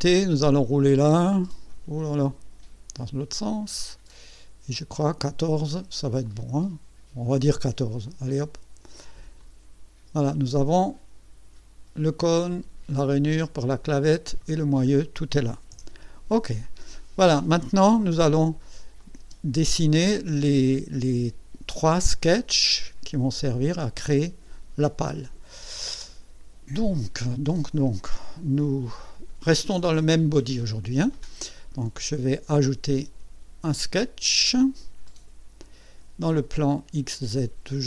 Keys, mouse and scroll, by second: 0.0-1.4 scroll down 6, 1.7 scroll up 2, 2.8-4.4 scroll up 8, 4.9 scroll down 2, 6.2-8.5 drag, 9.4 click, 10.3-14.6 drag, 14.6 scroll down 2, 15.7 KP_1, 16.6-17.3 right drag, 19.0 click, 19.2 space, 35.0 click, 37.1 click.